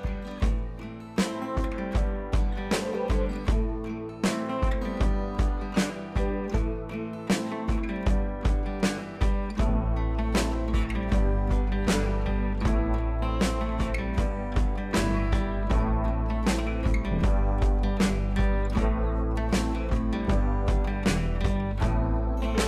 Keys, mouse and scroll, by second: 0.5-2.0 drag, 2.5-3.1 click, 4.6 ctrl+j, 5.5-7.4 drag, 10.2 ctrl+t, 10.8 scroll down 1, 10.9 ctrl+t, 11.4 scroll down 1, 11.6-12.3 alt+click, 12.6 scroll up 1, 13.7-14.3 drag, 15.6 scroll down 1, 17.3-19.1 drag, 20.4 ctrl+z, 20.7 click, 21.4 ctrl+z, 22.5 click, 22.5 ctrl+z.